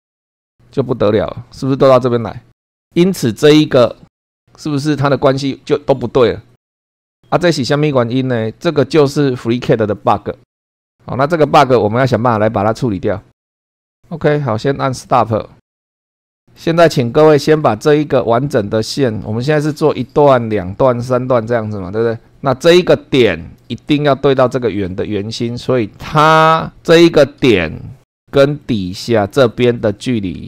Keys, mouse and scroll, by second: 0.4 click, 15.0 click, 15.8 middle click, 16.2 click, 16.4 click, 23.7-24.5 scroll up 2, 27.7-28.1 scroll down 1, 28.2 shift+middle click, 29.0-29.4 shift+scroll up 1.